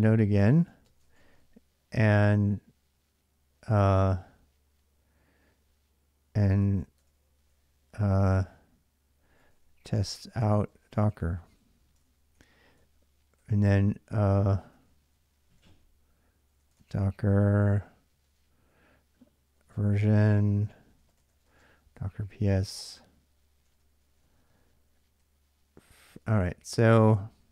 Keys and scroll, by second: 0.0-1.5 typing, 8.9-26.1 typing, 20.3 Return, 27.2 k.